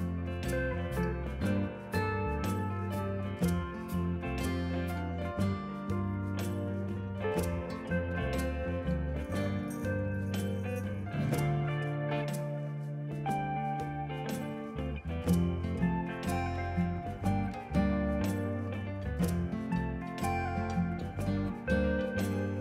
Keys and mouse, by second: 0.7 click, 1.1 Escape, 1.1 click, 1.2 right click, 1.4 click, 1.6 alt+v, 1.9 click, 2.9 click, 3.5 ctrl+shift+x, 3.7 click, 3.9 Escape, 4.1 click, 4.5 alt+y, 4.6 Escape, 4.8 click, 5.0 alt+y, 5.7 click, 5.9 alt+y, 7.0 alt+y, 7.3 click, 7.5 alt+y, 7.9 click, 13.5 alt+y, 14.4 click, 15.0 click, 16.4 alt+y, 17.1 click, 17.4 y, 17.6 click, 19.1 y, 19.9 click, 21.8 alt+y, 22.0 click.